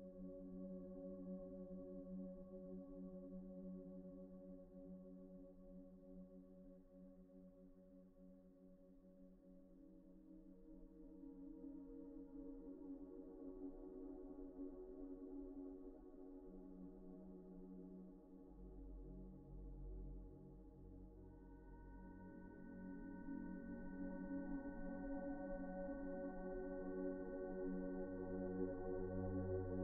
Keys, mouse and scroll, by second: 0.3-0.6 scroll down 1, 0.6 middle click, 2.7 Tab, 4.6 double click, 5.6 Tab, 6.4 scroll up 1, 6.8 shift+middle click, 9.2 scroll up 1, 9.4 shift+middle click, 9.7 scroll up 1, 12.5 scroll up 1, 13.2 middle click, 13.5-13.9 scroll up 1, 13.9 middle click, 16.8 alt+shift+click, 17.6 shift+middle click, 19.9 middle click, 21.1 alt+a, 22.2 alt+shift+click, 23.4 middle click, 26.2 middle click, 27.3 alt+shift+click, 27.9 middle click.